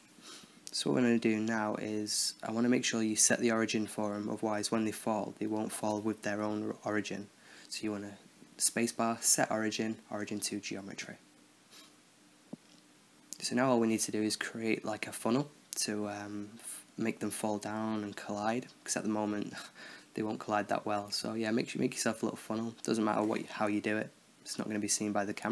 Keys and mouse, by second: 4.9-7.7 middle drag, 7.3 Tab, 9.3 shift+a, 11.1 b, 12.5 space, 13.2 Down, 14.0 Up, 14.2 Down, 14.3 Down, 15.0 shift+a, 15.6 s, 16.0-16.6 drag, 16.3 s, 16.8-17.6 drag, 17.6 Tab, 17.7-18.2 drag, 18.0 Tab, 18.5 click, 18.6 middle click, 18.9 right click, 19.0 x, 19.5-20.7 right drag, 20.7 Tab, 20.8 a, 20.9 a, 21.1 a, 21.3 right click, 21.5 x, 22.0 click, 22.4-23.6 middle drag, 24.2 m, 25.4 click.